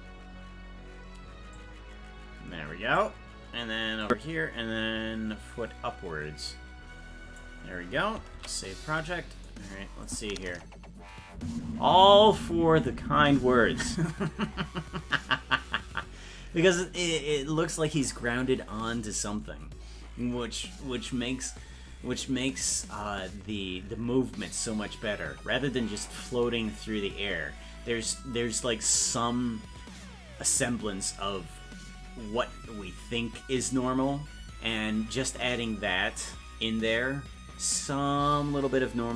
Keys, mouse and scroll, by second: 1.6-3.0 drag, 4.0 click, 6.5 click, 8.8 ctrl+s, 10.1 click, 11.4 space, 14.0 space.